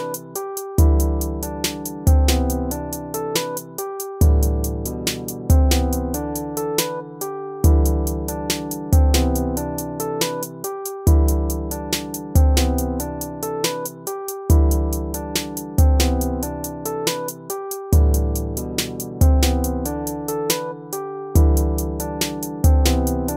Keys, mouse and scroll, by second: 5.6 ctrl+-, 7.4 ctrl++, 8.6 ctrl+-, 9.1 ctrl++, 9.6 ctrl++, 10.2 ctrl+-, 12.0 ctrl+-, 18.1 ctrl++, 18.7 ctrl++, 20.9 ctrl+-, 21.3 ctrl+-.